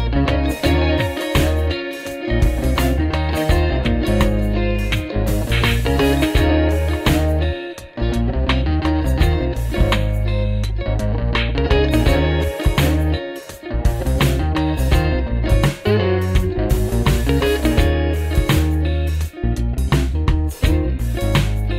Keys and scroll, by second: 3.0 ctrl+z, 7.7 Delete, 9.2 F4, 9.9 alt+q, 10.3 F4, 14.4-15.7 typing, 20.9 space, 21.1 e.